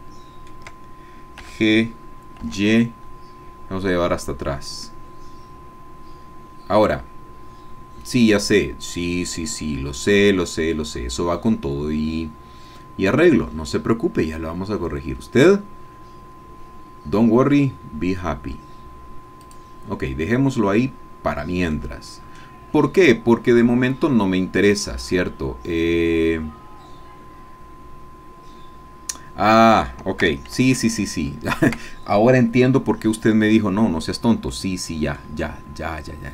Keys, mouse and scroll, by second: 1.4 g, 2.4 y, 19.4 click, 20.9-21.7 scroll down 1, 21.7 click, 23.0-23.9 scroll up 1, 23.9-30.1 drag, 34.5 middle click, 35.3-36.3 scroll up 1.